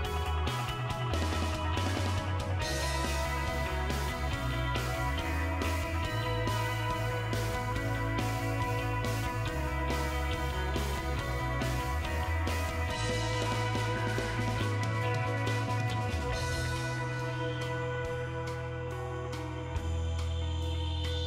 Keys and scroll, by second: 18.9 Delete.